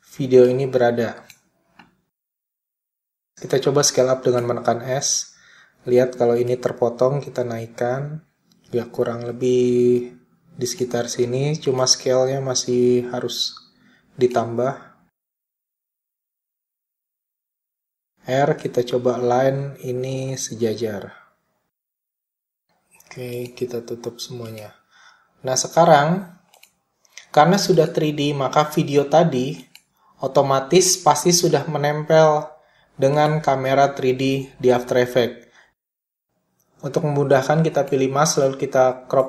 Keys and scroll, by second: 2.1 s, 17.4 r, 22.9 s.